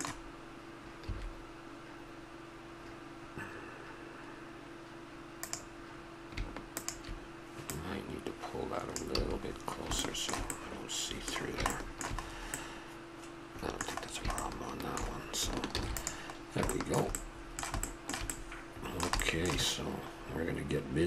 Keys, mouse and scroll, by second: 1.1 a, 5.3-9.1 drag, 9.1 a, 11.4-12.3 middle drag, 14.2-16.3 middle drag, 15.7 ctrl+s, 16.3-16.7 drag, 16.7-17.0 middle drag.